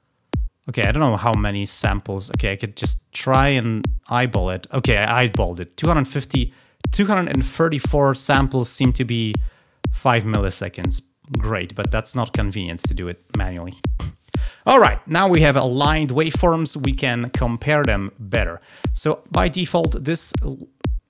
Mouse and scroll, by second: 1.2 scroll down 2, 1.9-2.3 scroll down 4, 3.0 scroll down 2, 3.6 scroll down 2, 11.4 click.